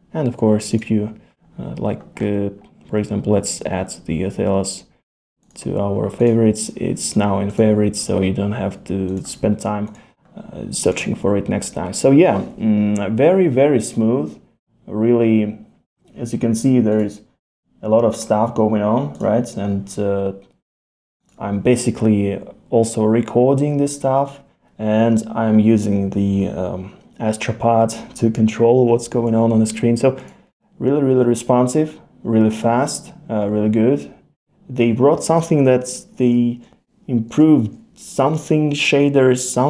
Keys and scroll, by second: 37.3 super+i.